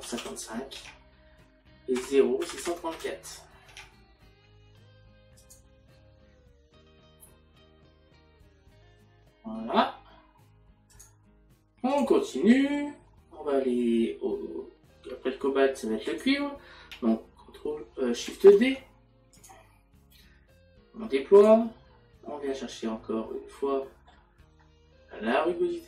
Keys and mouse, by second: 0.8 Tab, 5.4 click, 16.1 click, 23.3 middle click.